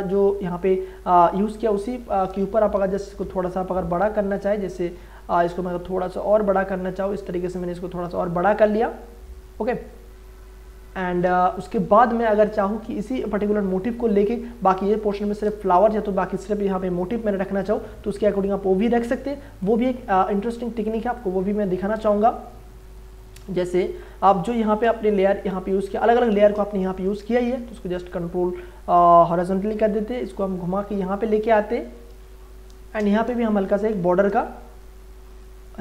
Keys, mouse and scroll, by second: 2.2 click, 2.7 ctrl+t, 4.0 click, 5.4 ctrl+t, 6.5 shift+click, 8.5-12.4 drag, 12.4 Return, 20.3 click, 21.6 ctrl+z, 21.9 ctrl+space, 22.2 ctrl+click, 22.3 ctrl+click, 22.5 ctrl+space, 23.0 click, 23.4 v, 24.0 click, 24.6 ctrl+z, 24.8 ctrl+space, 25.2 ctrl+click, 25.4 ctrl+space, 25.7 click, 26.0 ctrl+space, 26.3 ctrl+click, 26.9 ctrl+j, 27.2 ctrl+t, 28.0 right click, 29.3-32.2 drag, 32.2 space, 32.4 ctrl+click, 33.7 Return, 34.4 space, 34.6 ctrl+click, 35.0 click, 35.7 ctrl+click.